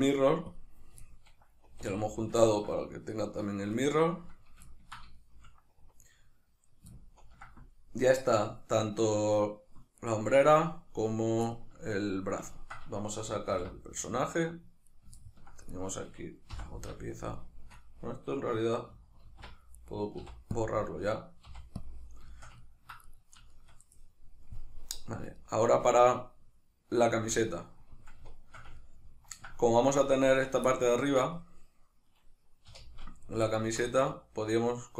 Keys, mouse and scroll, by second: 0.6 click, 1.1-10.0 shift+middle drag, 1.7 a, 10.0-11.6 right drag, 11.6-14.9 ctrl+middle drag, 14.0 alt+h, 14.9 right click, 15.2-15.7 ctrl+middle drag, 15.7 right click, 16.6 h, 17.0-19.7 shift+middle drag, 19.2 alt+h, 19.7 right click, 20.2 x, 20.6 click, 21.4 x, 22.3-23.1 shift+middle drag, 23.1 right click, 23.5-28.8 shift+middle drag, 30.3 Tab, 30.8 ctrl+middle click, 32.7 3, 33.4 alt+right click, 33.8 middle click.